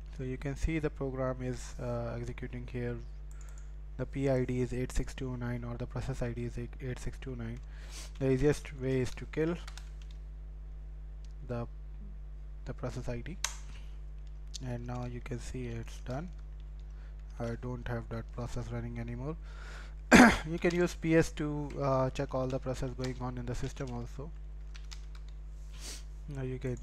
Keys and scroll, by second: 7.6-9.0 typing, 9.7 shift+Insert, 11.9 typing.